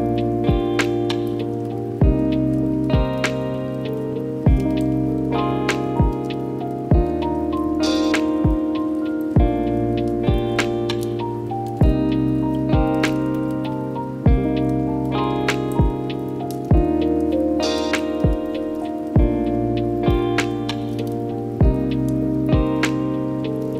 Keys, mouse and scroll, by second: 0.0 ctrl+z, 0.2 middle click, 0.3 a, 0.3 a, 0.4-1.0 middle drag, 1.0-1.7 scroll up 12, 1.1 middle click, 1.3-1.6 shift+middle drag, 1.7 middle drag, 2.0 right click, 2.1 middle click, 2.2 g, 2.3 middle click, 2.3 scroll down 3, 2.5-3.2 scroll up 6, 2.8 right click, 3.2 Tab, 3.4 alt+s, 3.7 Tab, 3.9-4.4 right drag, 4.4 middle click, 4.5 scroll up 2, 4.6 middle click, 5.1 alt+shift+z, 5.3 middle click, 5.6-5.9 scroll up 6, 5.7 shift+middle click, 5.9 shift+middle click, 6.0 alt+shift+z, 6.2 Tab, 6.4 alt+s, 6.8 Tab, 6.9-8.7 middle drag, 8.8-10.1 drag, 10.1 right click, 10.3 Tab, 10.8 shift+d, 13.3 alt+s, 14.6 s, 16.0 p, 16.9 Tab, 17.1 right click, 17.5 Tab, 18.0 right click, 19.4-20.8 middle drag, 20.8-23.2 drag.